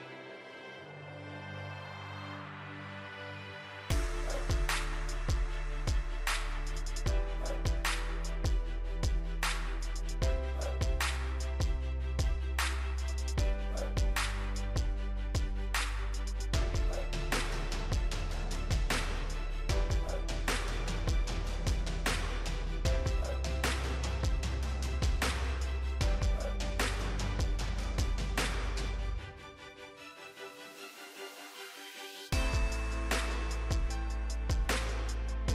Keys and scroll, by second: 4.7 ctrl+g.